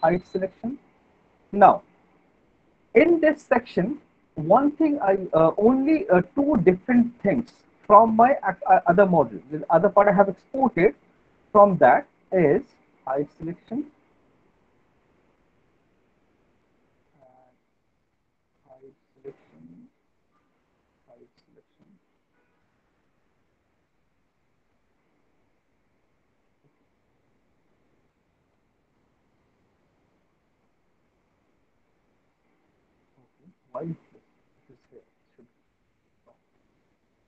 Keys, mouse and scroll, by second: 0.0 click, 0.7 alt+middle click, 0.7 right click, 1.1 middle click, 1.3 middle click, 1.4 alt+middle click, 1.9 alt+middle click, 2.3 middle click, 2.9 alt+middle click, 4.4 middle click, 5.8 middle click, 7.4 alt+middle click, 9.3 click, 11.1 click, 11.9 right click, 13.2 click, 14.8 alt+middle click, 15.4 middle click, 15.6 alt+middle click, 15.9 middle click, 16.5 alt+middle click, 17.7 click, 18.1 right click, 19.1 click, 19.9 click, 23.2 right click, 24.2 click, 26.3 click, 28.2 ctrl+click, 29.8 alt+click, 33.1 ctrl+click, 33.3 alt+click, 33.3 alt+middle click, 33.9 click, 34.5 click, 34.6 ctrl+click, 35.1 Delete, 36.6 alt+middle click.